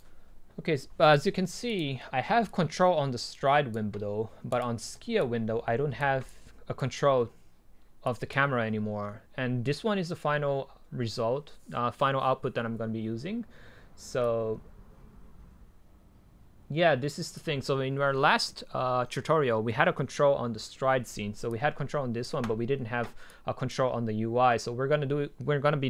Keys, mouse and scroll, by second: 14.3-19.1 drag, 21.8 click.